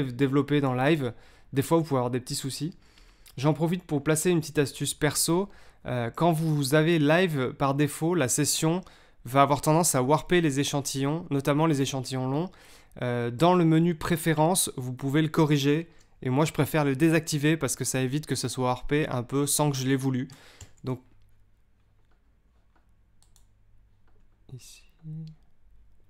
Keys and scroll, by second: 20.5 super+m.